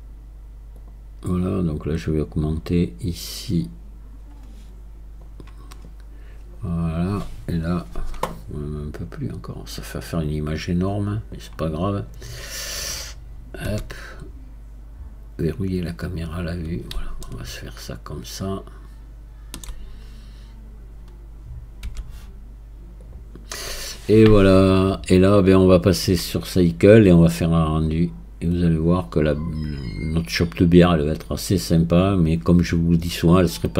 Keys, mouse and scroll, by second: 0.8-6.6 drag, 6.6-8.2 scroll down 1, 8.2-9.6 scroll down 1, 16.0-17.2 scroll up 2, 17.2-20.2 shift+middle drag, 27.9-28.6 scroll up 3, 28.6-31.0 scroll up 1.